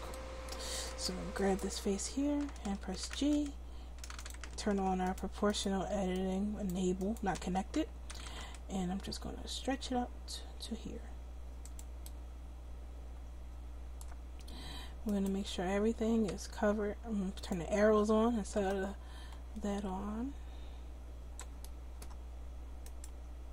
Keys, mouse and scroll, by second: 3.2 g, 4.5 ctrl+z, 8.3 g, 10.2-11.7 middle drag, 10.2-11.7 scroll up 1, 15.1-16.8 right drag, 17.4-19.9 drag, 21.7-23.5 middle drag.